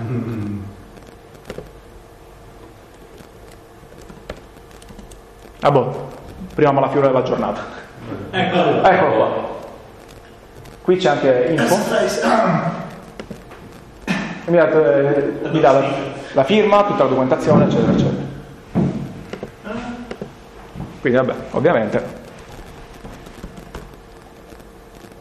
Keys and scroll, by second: 3.0-4.8 typing, 23.4-24.4 typing.